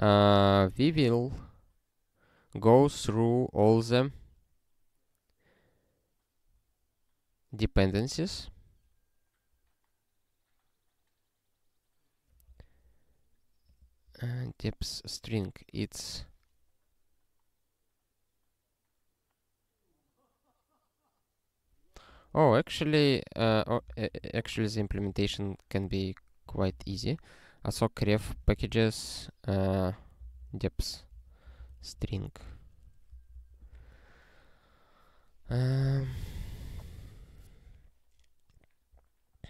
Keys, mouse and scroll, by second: 13.7 click, 23.4 ctrl+n, 23.9 ctrl+b, 23.9-32.3 typing, 32.6 alt+^, 33.1 ctrl+e, 33.3 Return, 33.8 ctrl+s, 39.1 scroll down 1.